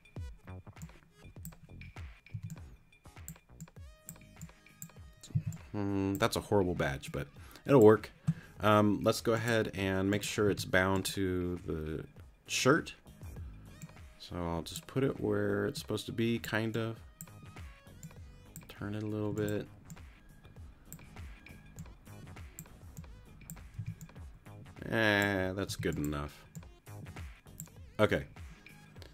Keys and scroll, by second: 2.3 t, 5.3 c, 10.5 t, 19.3 t, 23.8 t, 25.7 t.